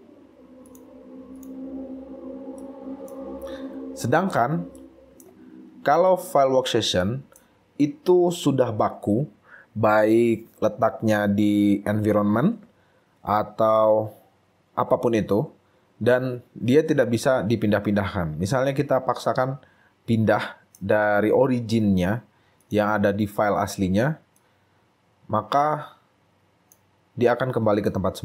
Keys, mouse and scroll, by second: 1.6 right click, 2.7 right click, 3.6-3.9 scroll up 2, 4.7 scroll up 1, 4.9 shift+right click, 5.5 shift+scroll down 3, 6.2 shift+right click, 6.7 shift+scroll down 2, 7.3 right click, 20.3 right click, 21.3-21.9 scroll up 2, 23.6 scroll down 2.